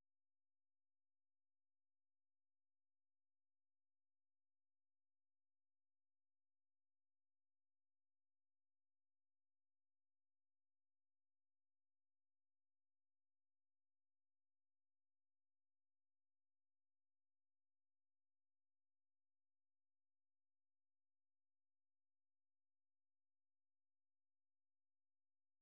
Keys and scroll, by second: 0.5-4.4 typing, 8.3 super+2, 10.6 super+1, 12.5-16.0 typing, 17.8-18.5 typing, 18.8 ctrl+t, 19.5-22.3 typing.